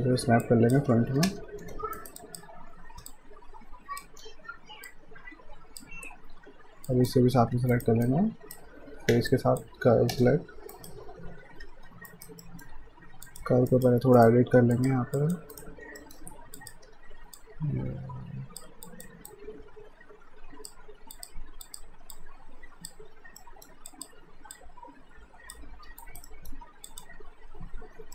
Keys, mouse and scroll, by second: 0.0-1.6 typing, 0.4 click, 2.0 right click, 2.2 alt+click, 3.1 click, 4.2 w, 4.9 click, 6.9 shift+click, 7.5 q, 7.7 right click, 9.3 shift+click, 10.1 space, 10.7 right click, 11.6 q, 12.1 right click, 12.4 middle click, 13.2 click, 13.7 right click, 14.7 click, 15.6 right click, 16.0 middle click, 16.6 click, 16.9 w, 17.4 click, 23.4 alt+middle click, 23.9 alt+click, 26.0 alt+right click, 26.3 alt+middle click, 26.9 click.